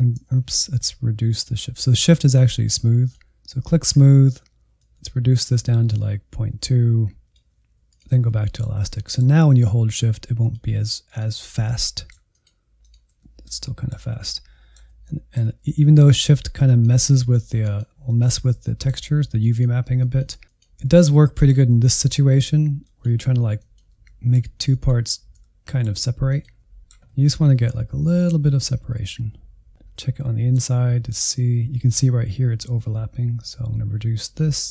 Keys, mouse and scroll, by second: 0.6 ctrl+z, 3.0-8.2 drag, 8.2-10.4 middle drag, 10.4-11.7 shift+drag, 11.7 middle click, 12.3 shift+click, 13.2-16.2 middle drag, 16.2-18.7 shift+drag, 18.7 middle click, 19.3 shift+click, 20.0 middle click, 20.4 shift+click, 20.6-21.8 middle drag, 21.8 shift+click, 22.4 middle click, 22.8 shift+click, 23.2 middle click, 23.7 shift+click, 24.0 scroll down 1, 24.2 middle click, 24.7 scroll down 1, 24.8 middle click, 25.3 scroll up 4, 25.6-27.1 middle drag, 27.1 scroll down 3, 27.4 middle click, 28.0 /, 28.4 middle click, 28.6 scroll up 4, 28.8 middle click, 29.6-30.0 scroll up 3, 30.0-32.1 middle drag, 32.1 f, 33.2-34.7 shift+drag.